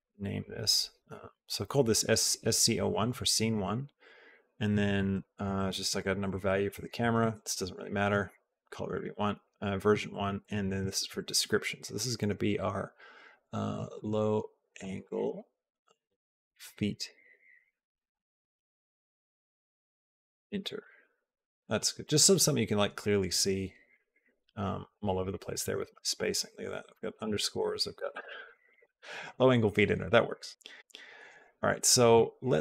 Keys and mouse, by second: 1.5 Left, 1.6 Left, 2.9 Right, 3.3 Right, 3.9 Right, 4.8 Right, 5.2 Left, 5.7 Right, 6.8 Left, 7.2 Right, 9.9 Right, 10.4 Right, 10.9 shift+Left, 11.1 shift+Left, 16.6 e, 17.5 BackSpace, 17.7 BackSpace, 18.2 e, 23.9-28.7 drag, 26.2 Left, 26.3 Left, 26.7 Left.